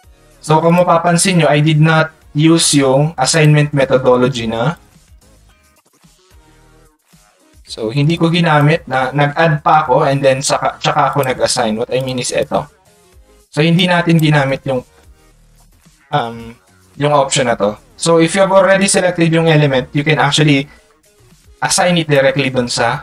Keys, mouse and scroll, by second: 0.7 click, 2.2 click, 3.3 click, 4.7 click, 5.1 click, 8.1 click, 13.8 click, 15.1 ctrl+click, 21.4 click.